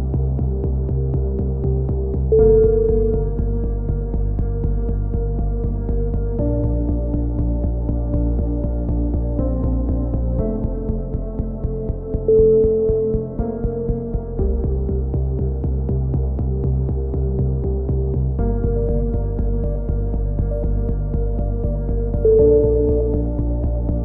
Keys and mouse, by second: 0.2 a, 0.2 z, 1.2-1.6 right drag, 1.6 f, 1.6 a, 2.5-2.8 right drag, 2.5 x, 3.5-4.1 right drag, 3.5 shift+s, 4.1 Tab, 4.4 Tab, 4.6 drag, 4.6-6.8 typing, 4.8-5.1 right drag, 8.9 x, 10.0 ctrl+r, 10.4 a, 10.8 ctrl+r, 11.3 a, 11.5 c, 14.4-15.6 right drag, 14.4 x, 15.6 a, 16.9 shift+d, 22.7 ctrl+z, 23.7-24.0 drag.